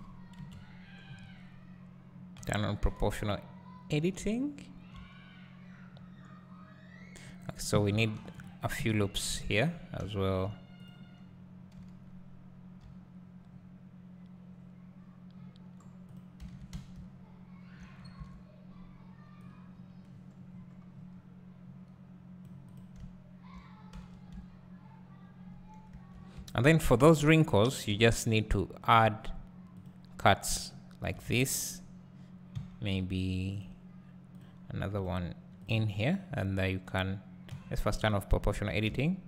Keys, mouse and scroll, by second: 0.4 KP_Decimal, 1.1-2.7 scroll up 1, 2.7 o, 8.0 ctrl+r, 8.7 right click, 9.0 ctrl+r, 9.7 right click, 10.9 click, 11.8 KP_7, 12.9 g, 16.4 click, 17.0 `, 18.0 scroll up 2, 18.3 Tab, 19.5-22.8 drag, 23.1 `, 24.0 Tab, 24.1 Tab, 24.5 `, 26.0 Tab, 26.4 `, 27.1 alt+a, 31.3 alt+a, 32.6 k, 37.5 o, 38.0 click, 38.9 `.